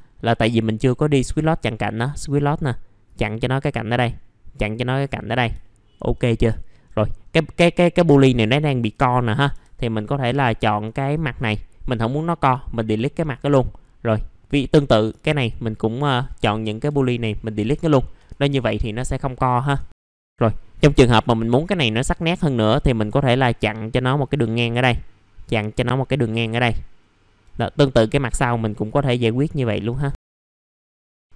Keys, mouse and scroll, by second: 0.1-0.6 scroll up 1, 0.6 middle click, 1.6-4.0 drag, 5.2 scroll down 1, 5.6 alt+middle click, 6.1 right click, 6.5 alt+middle click, 7.2 scroll up 1, 8.2 middle click, 8.5 alt+middle click, 9.3-9.9 scroll up 4, 9.9 click, 10.3 scroll down 1, 10.6 alt+middle click, 12.4 Delete, 12.9 middle click, 13.5 scroll up 1, 14.0 click, 15.2 alt+middle click, 16.8 Delete, 17.4 scroll down 1, 19.0 F4, 20.1 middle click, 20.1 scroll down 1, 21.1-21.5 scroll up 1, 21.5 middle click, 21.9 alt+middle click, 23.0 click, 26.2 alt+middle click, 28.7 click, 30.2 right click, 30.3 alt+middle click, 30.6-31.1 scroll down 2, 31.1 middle click.